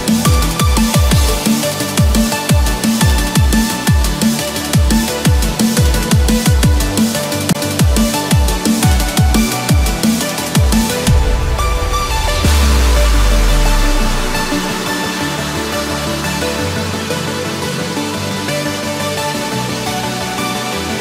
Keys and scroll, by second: 1.0 ctrl+-, 10.2 Return.